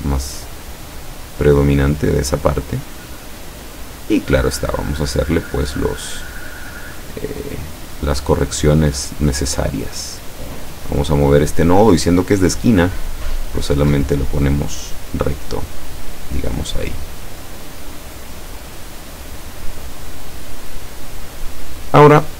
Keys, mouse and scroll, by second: 1.0-4.6 drag, 4.9 click, 6.3 click, 6.8-8.8 drag, 9.4-11.9 drag, 12.8 click, 13.3-14.3 drag, 14.9-16.5 drag, 16.9-17.9 drag, 18.8-20.1 drag.